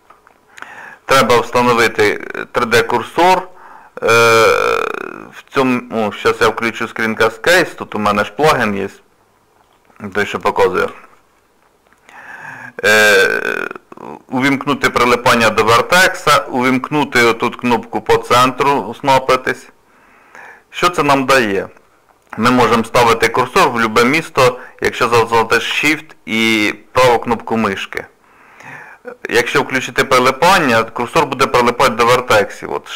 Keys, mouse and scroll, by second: 9.6 click, 10.8 n, 13.7 click, 27.0 shift+right click, 27.5 shift+right click, 30.2 click.